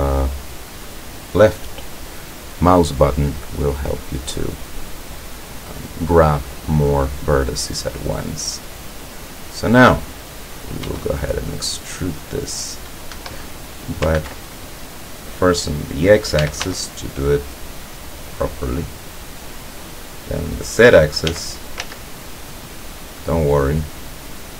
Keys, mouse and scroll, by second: 4.4 scroll down 2, 4.9-7.7 drag, 7.9 scroll down 2, 8.2-9.4 drag, 10.9 e, 13.2 Escape, 14.2 ctrl+z, 16.5 e, 16.7 x, 19.7 click, 21.3 e, 21.8 z, 23.7 click, 24.4-24.5 drag.